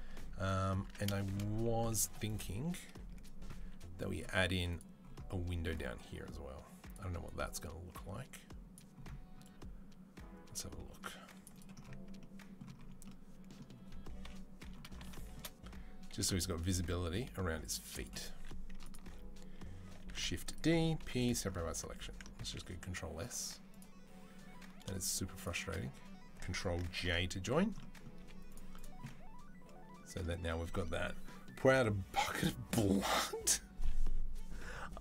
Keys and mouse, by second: 0.6 Tab, 1.8 4, 2.1-3.4 drag, 3.4-18.6 middle drag, 3.4 c, 14.0 KP_3, 16.0 i, 18.1 3, 18.6 alt+click, 18.7-23.5 alt+middle drag, 19.8 shift+d, 20.8 p, 21.5 Tab, 22.6 ctrl+s, 23.5 click, 23.6-25.2 middle drag, 25.2 shift+click, 25.2-35.0 shift+middle drag, 26.8 ctrl+j, 28.0 z.